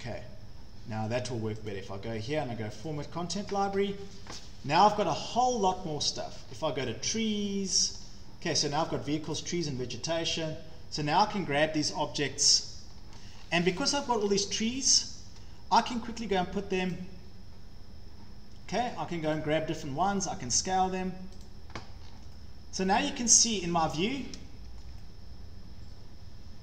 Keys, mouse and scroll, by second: 0.0 click, 1.7 click, 2.9 click, 4.6-5.0 scroll down 4, 6.4 scroll down 2, 8.0 scroll down 2, 9.4 click, 9.7 scroll, 10.4 click, 12.4-13.5 scroll down 7, 14.1 scroll up 4, 14.5 scroll down 1, 15.4 scroll down 1, 16.1 scroll, 17.0 click, 18.0 scroll down 7, 19.4 click, 20.1-20.4 scroll, 21.5 click, 22.0 scroll, 23.3 scroll, 23.7 Escape, 23.9 Escape, 24.8 scroll.